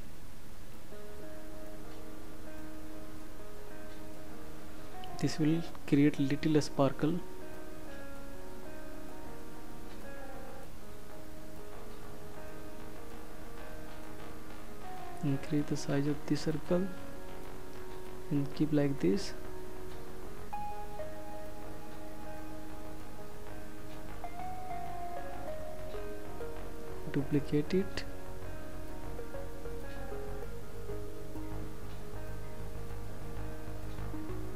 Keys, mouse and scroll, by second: 7.7 click, 14.4 click, 15.3 shift+click, 25.9 ctrl+d.